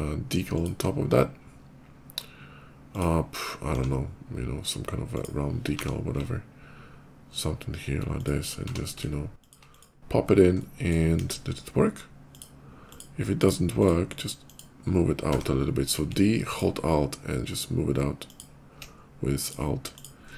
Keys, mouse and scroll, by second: 3.6 s, 5.0 click, 5.6 g, 6.2 ctrl+g, 8.0 ctrl+click, 8.5 d, 9.2 alt+click, 9.5 alt+click, 10.4 alt+middle click, 11.0 KP_5, 12.1 click, 12.7 click, 13.2 click, 13.6 click, 14.0 click, 14.2 click, 15.2 d, 16.3 alt+click, 18.1 alt+click, 19.2 alt+click, 19.6 alt+click.